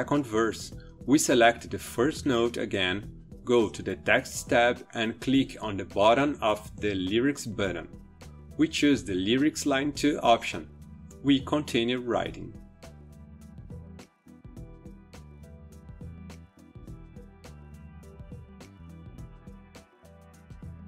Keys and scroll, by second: 11.2-20.8 typing.